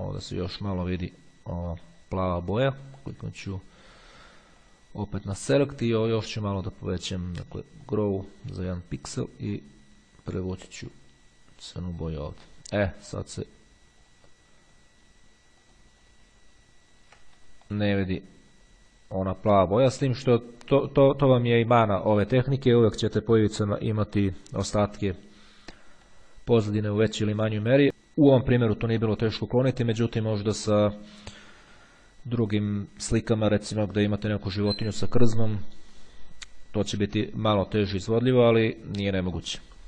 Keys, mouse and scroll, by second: 4.8 click, 7.8 click, 9.2 click, 11.1-12.8 drag, 14.1 click, 15.8 click, 16.7-17.2 ctrl+scroll down 2, 17.6 ctrl+middle click, 17.8 ctrl+click, 19.6 click, 19.8 middle click, 25.8 click, 26.1 middle click, 28.8-29.8 drag, 37.6-38.6 drag, 39.2-39.8 middle drag.